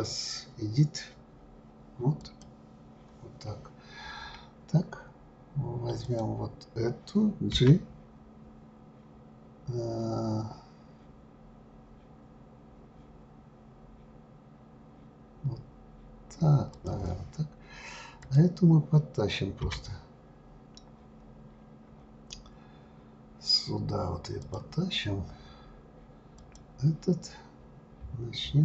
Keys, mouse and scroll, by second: 4.0 scroll down 1, 4.2-4.8 scroll up 3, 6.0 click, 7.5 g, 18.2 click, 19.6 g, 26.4 click.